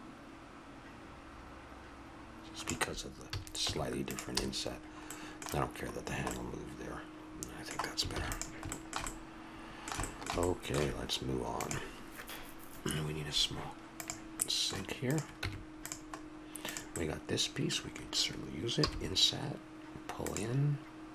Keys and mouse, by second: 3.3 a, 3.7 Tab, 4.4 a, 8.1 ctrl+s, 15.1-18.5 drag, 15.4 Tab, 18.8 i.